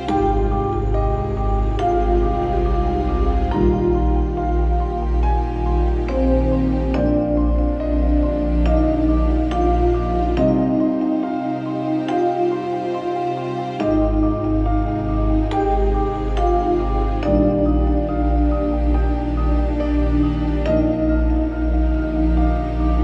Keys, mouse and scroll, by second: 0.1 middle click, 0.8 z, 1.0 alt+middle click, 1.6 alt+middle click, 2.4 middle click, 3.7 m, 5.0 Delete, 10.5 middle click, 16.1 KP_3, 16.2 Return, 16.8 KP_3, 17.1 Return, 18.0 KP_5, 18.4 KP_5, 18.5 Return, 19.0 KP_5, 19.0 Return, 19.6 middle click, 20.1 middle click.